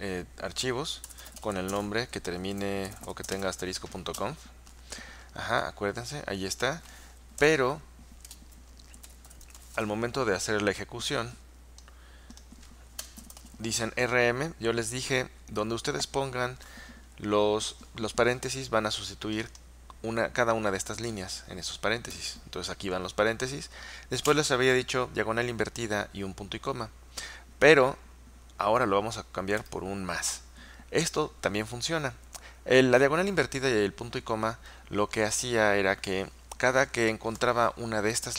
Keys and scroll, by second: 1.0-3.9 typing, 5.6 typing, 7.5-10.3 typing, 13.2-14.2 typing, 22.2 typing, 24.3 typing, 29.6 typing.